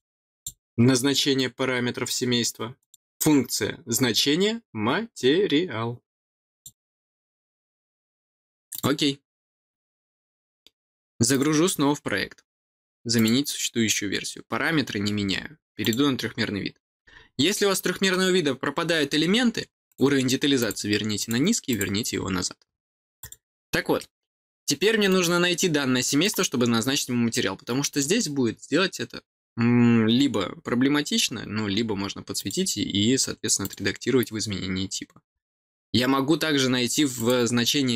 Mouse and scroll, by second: 1.6 click, 3.1 click, 8.6 click, 11.2 click, 13.1 click, 15.7 click, 17.1 middle click, 17.4 middle click, 19.8 click, 20.5 click, 21.1 click, 21.6 click, 23.1 click, 25.0-26.2 middle drag, 27.8 click, 32.3 click, 33.6 click, 37.1 click, 37.7-37.9 scroll down 3.